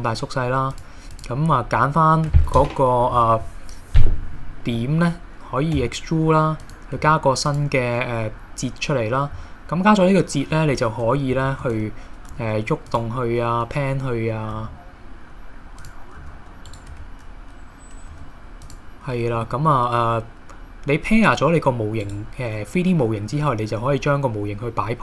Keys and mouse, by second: 1.2 click, 5.8 e, 6.7 click, 7.0 e, 7.5 click, 11.5 shift+middle click, 12.3 g, 14.6 g, 16.2 g, 16.9 Tab, 18.2 r, 18.6 click, 19.4 r.